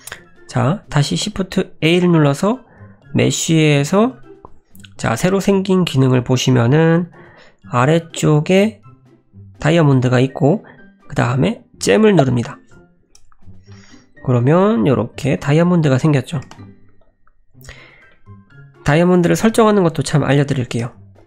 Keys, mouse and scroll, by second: 1.4 middle click, 1.9 shift+a, 13.0-14.0 scroll down 9, 13.7 middle click, 14.0-14.4 scroll up 2, 14.4 s, 15.5-16.0 scroll up 6, 16.0 middle click, 16.4 g, 17.9 scroll down 2, 18.1 middle click, 20.6 g.